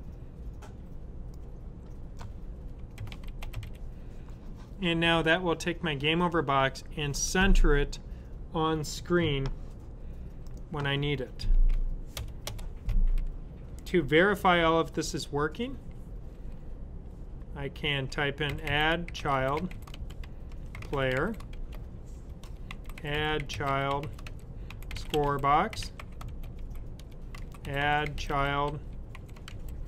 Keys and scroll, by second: 2.6-4.0 typing, 17.7-29.8 typing.